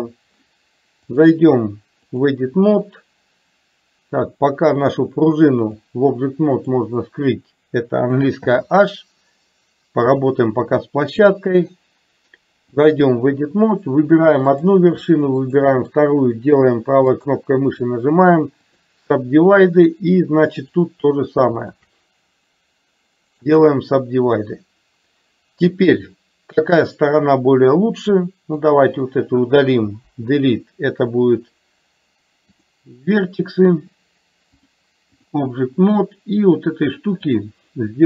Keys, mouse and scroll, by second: 1.2-2.3 drag, 4.8-5.8 drag, 6.7 click, 8.5 h, 11.8-13.1 drag, 14.6 click, 15.6 shift+click, 17.2-19.0 right drag, 21.7 shift+click, 23.5-24.7 right drag, 27.3-28.7 drag, 30.1 Delete, 34.6 click, 37.5-38.0 drag.